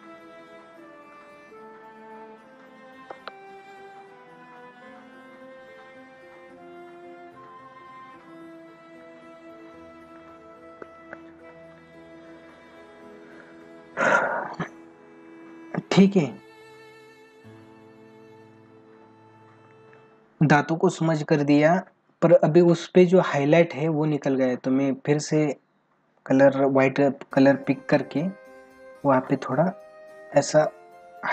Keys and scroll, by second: 2.0 ], 3.1 ctrl+alt+z, 3.9 ], 7.2 ], 10.5 ctrl+-.